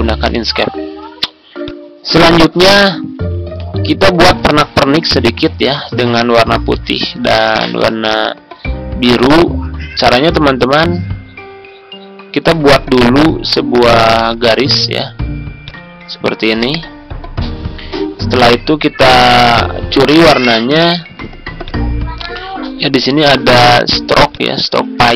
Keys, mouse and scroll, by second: 0.0 ctrl+scroll down 1, 1.6-14.8 drag, 14.8-15.2 scroll down 2, 15.6-25.1 drag.